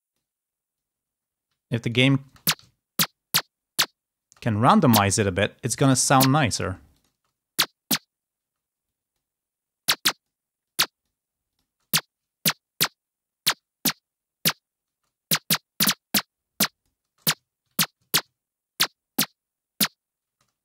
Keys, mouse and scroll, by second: 0.0 click, 0.9-1.9 alt+drag, 2.6 ctrl+alt+space, 2.6 ctrl+alt+scroll down 3, 2.9-3.6 ctrl+scroll up 2, 4.6 space, 4.8 click, 6.4 click, 7.3 space, 8.4 space, 9.1 click, 9.9-11.6 drag, 11.6 space, 15.1 space, 15.2-17.1 drag, 17.1 space, 17.4-17.9 ctrl+scroll down 1, 17.9 ctrl+scroll up 1, 20.2 space.